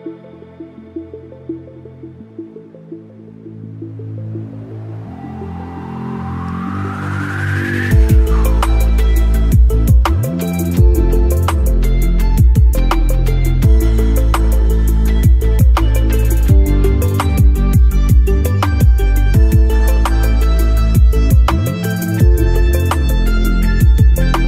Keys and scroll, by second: 4.4 shift+F2, 5.0 Escape, 5.8 F9.